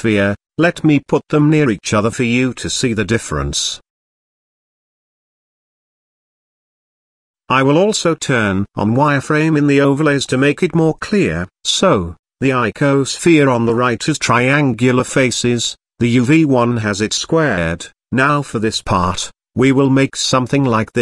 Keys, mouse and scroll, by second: 0.7-1.1 middle drag, 1.2-1.8 scroll up 3, 1.8 g, 2.0 x, 2.7 click, 3.5 KP_1, 4.1-4.5 scroll up 4, 4.5-5.3 shift+middle drag, 8.2-10.0 drag.